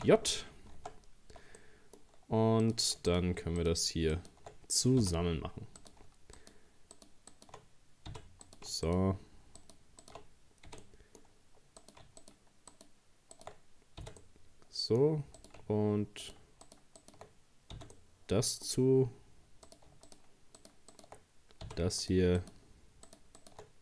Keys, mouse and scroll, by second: 0.0 ctrl+j, 0.8 Tab, 1.2-1.6 scroll up 2, 1.6-2.6 middle drag, 2.6 right click, 3.1 shift+right click, 3.6 shift+right click, 4.2 shift+right click, 5.0 f, 5.8 right click, 6.4 shift+right click, 7.0 shift+right click, 7.3 shift+right click, 8.1 f, 8.5 right click, 8.9 shift+right click, 9.6 shift+right click, 10.0 shift+right click, 10.7 f, 10.8-11.8 middle drag, 11.8 right click, 12.2 shift+right click, 12.7 shift+right click, 13.4 shift+right click, 14.0 f, 14.2-15.4 middle drag, 15.4 right click, 16.2 shift+right click, 16.7 shift+right click, 17.0 shift+right click, 17.8 f, 18.0 middle click, 18.8-19.7 scroll up 2, 19.7 right click, 20.1 shift+right click, 20.6 shift+right click, 20.9 shift+right click, 21.7 f, 22.0 right click, 22.4 shift+right click, 23.1 shift+right click, 23.4 shift+right click.